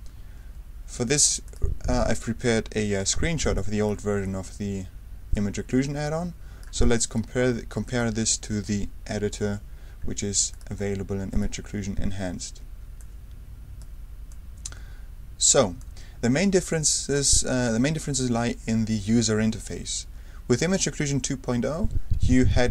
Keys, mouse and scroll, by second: 1.4 click, 3.0 ctrl+alt+r, 3.5 ctrl+alt+super+click, 4.2 super+right click, 6.0 ctrl+click, 6.8 right click, 7.8 click, 8.0 middle click, 8.0 a, 9.1 alt+o, 10.5 click, 11.3 click, 13.0-15.9 super+drag, 16.6 click, 18.3-18.8 ctrl+super+scroll down 3.